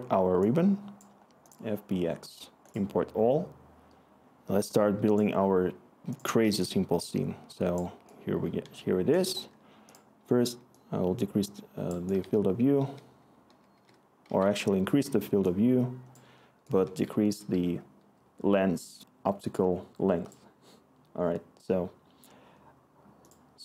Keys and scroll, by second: 11.8-14.2 typing, 16.6-17.7 typing.